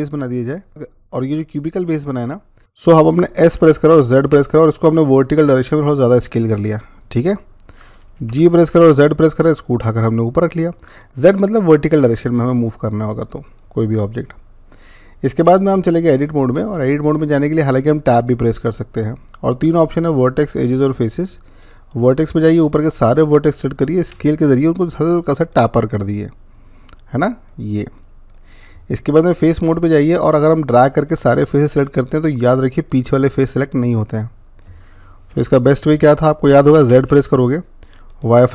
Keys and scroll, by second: 2.6 ctrl+z, 3.3-4.0 typing, 7.8-8.6 typing, 23.8-24.5 typing, 36.8 z.